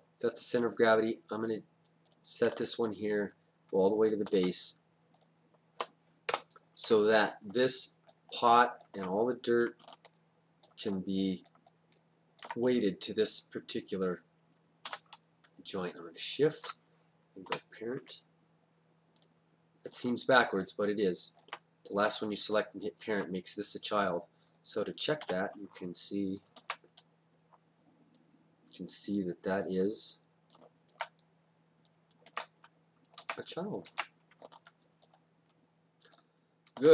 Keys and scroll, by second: 6.3 Return, 14.9 w, 17.5 p, 25.3 d, 32.3 ctrl+z, 33.2 ctrl+z, 33.9 ctrl+z.